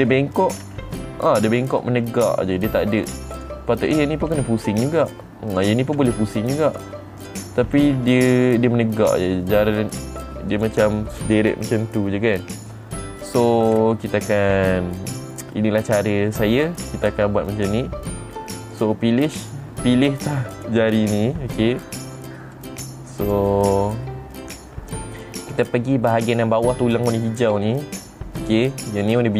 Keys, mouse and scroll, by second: 0.1 middle click, 1.2 r, 3.9 right click, 4.4 click, 4.9 r, 5.5 right click, 6.1 click, 6.5 r, 7.2 right click, 7.8 click, 8.3 r, 11.0 right click, 14.3-15.7 scroll down 2, 15.7 middle click, 19.3 click, 21.1 click, 23.1 click, 23.7 click.